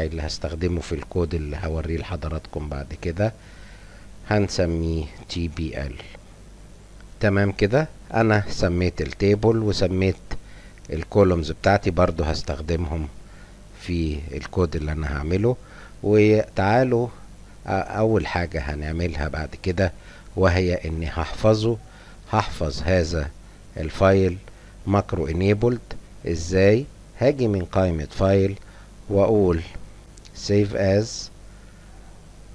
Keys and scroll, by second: 1.7 F10, 1.9-7.6 typing, 7.3 Return.